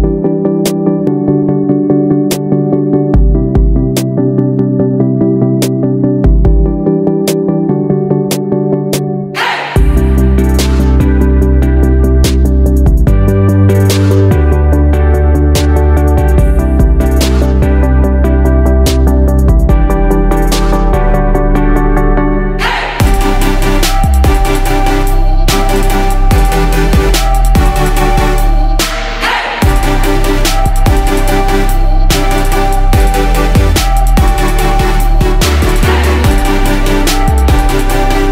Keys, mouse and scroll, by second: 10.6 ctrl+d, 11.1-15.4 drag, 16.8 right click, 18.4-23.3 drag, 26.1 ctrl+d, 26.6-29.4 drag, 31.2 right click, 33.4 click.